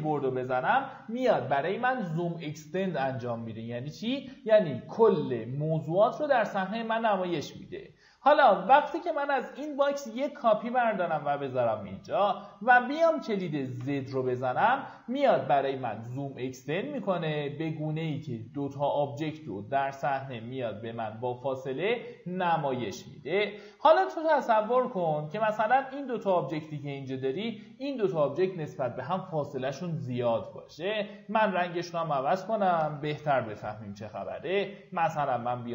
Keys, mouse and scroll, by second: 7.0-7.4 scroll down 1, 7.7 click, 8.2-9.0 scroll down 1, 9.0 typing, 9.5 scroll down 1, 9.8 shift+click, 11.6 click, 12.0 q, 12.4 click, 13.7 z, 22.7-23.4 scroll down 1, 23.8-24.3 typing, 24.9-25.6 scroll down 1, 25.6 z, 27.3-32.9 drag, 33.2 ctrl+a, 34.1 click.